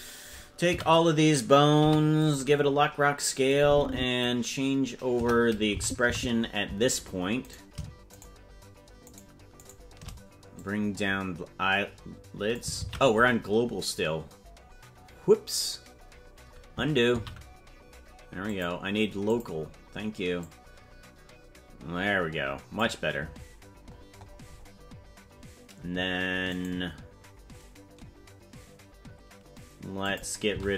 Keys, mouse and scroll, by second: 0.7-1.4 scroll down 3, 0.7 a, 1.8 i, 3.5 click, 5.1 KP_0, 5.8 Left, 6.1 Right, 7.6 right click, 8.3-10.0 shift+right drag, 10.6-12.6 drag, 13.2 ctrl+z, 17.5 ctrl+z, 18.5-19.6 drag, 20.4-22.8 drag, 23.9-24.9 scroll up 16, 26.5 right click, 30.1 click, 30.5 c.